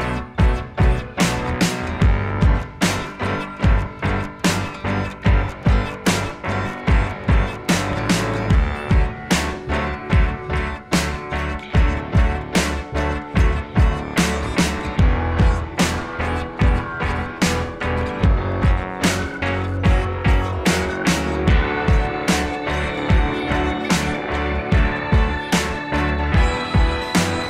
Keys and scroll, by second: 1.3 Down, 4.7 ctrl+=, 18.4 ctrl+c, 18.5 ctrl+v, 19.7 Left, 20.3 Delete, 21.2 Delete, 26.5 ctrl+a, 27.4 ctrl+0.